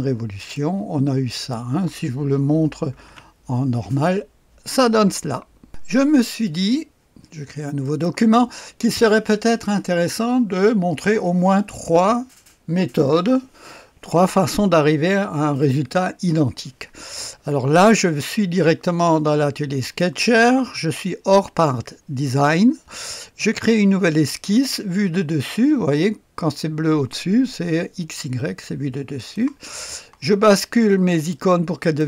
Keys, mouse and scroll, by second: 0.3 click, 1.3 right click, 1.5 click, 2.9 v, 3.0 KP_1, 5.7 click, 7.8 right click, 8.0 click, 18.3-20.7 drag, 24.2 click, 29.1 click, 31.1-32.0 drag.